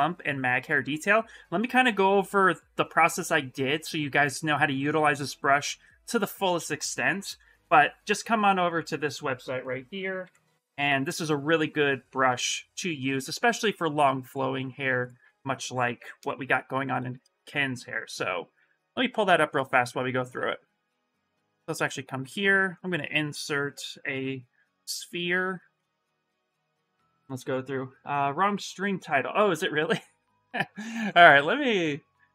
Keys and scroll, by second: 10.0 ctrl+v, 10.6 Return, 20.1 Escape.